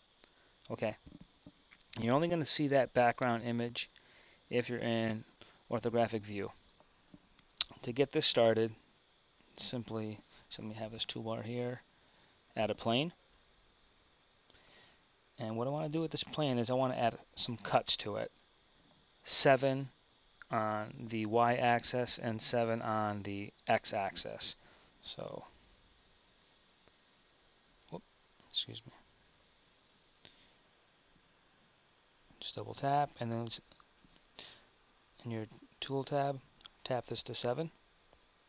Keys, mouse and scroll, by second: 3.2 KP_1, 6.7 n, 10.6 t, 12.4 shift+a, 16.9 Tab, 26.8 shift+r, 28.5 Tab, 29.6 ctrl+r.